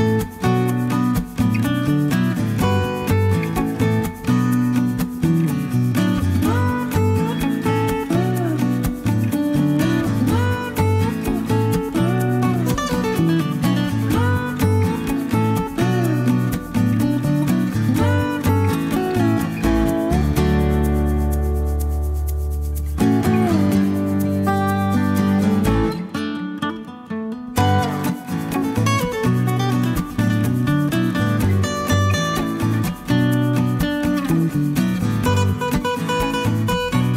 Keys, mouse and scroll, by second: 0.2 click, 2.7 click, 3.5 ctrl+click, 4.7 ctrl+click, 6.5-9.1 right drag, 12.2 click, 12.5-13.9 middle drag, 13.9 click, 14.7 click, 16.1 click, 17.5 click, 19.2 middle click, 19.7-21.9 drag, 21.9-23.1 middle drag, 22.3 0, 27.0 click, 28.1 click, 28.9 click, 29.9 click, 30.9 click, 32.1 click, 33.6 click, 34.8 click, 35.7 click.